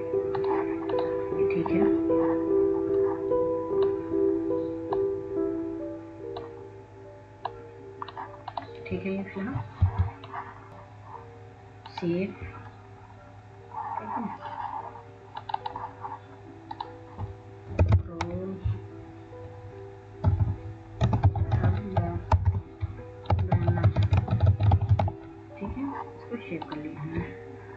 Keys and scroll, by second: 19.0-19.9 typing, 21.7-23.8 typing, 25.1-26.9 typing.